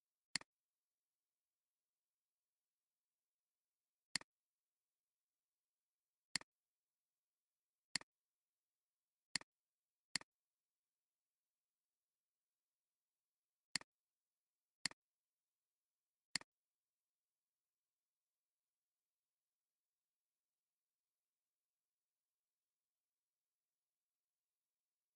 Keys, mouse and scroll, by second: 13.4 alt+scroll down 1, 13.6 space, 14.4-14.8 alt+scroll up 3, 14.7 space, 16.1 space.